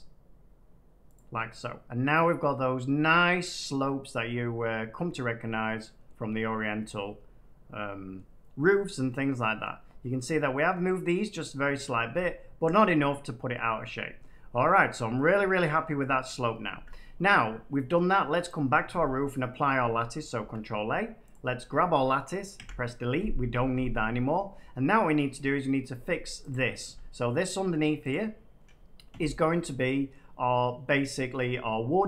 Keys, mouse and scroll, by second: 1.1 click, 3.7 middle click, 6.0 middle click, 8.1 middle click, 9.6 middle click, 10.7 middle click, 11.7-13.5 middle drag, 12.5 scroll, 14.1 middle click, 15.0 middle click, 15.2-16.7 middle drag, 16.7 Tab, 18.4 click, 19.6 click, 20.3 ctrl+a, 21.2 click, 22.5 Delete, 24.8 middle click, 25.9 Tab, 26.4 click, 26.8 Tab, 28.0 click, 28.9 click, 30.1 middle click, 31.3 middle click.